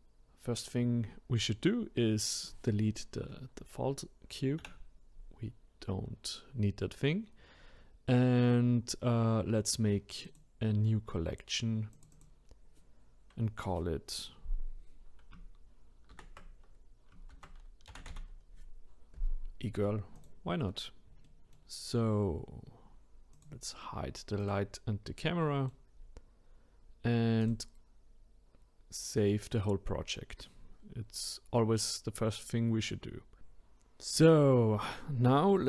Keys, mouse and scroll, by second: 4.6 Delete, 10.3-12.0 drag, 12.1-15.2 drag, 21.3-23.3 middle drag, 23.3 click, 24.4 click, 25.0-27.4 middle drag, 27.4-30.5 drag, 34.1-35.6 middle drag.